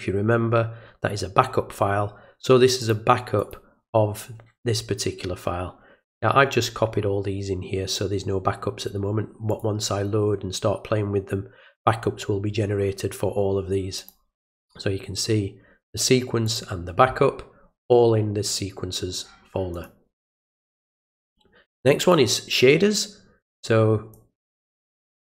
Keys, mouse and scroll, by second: 2.8 click, 3.4 click, 9.5 click, 14.0 click, 16.4 click, 19.7 click, 21.8 click, 22.0 click, 24.1 click.